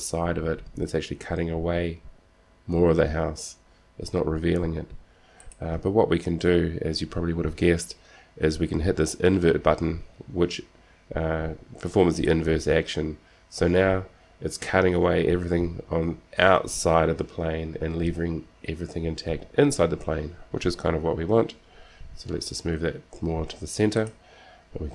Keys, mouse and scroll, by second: 12.4-14.3 drag, 22.1 g.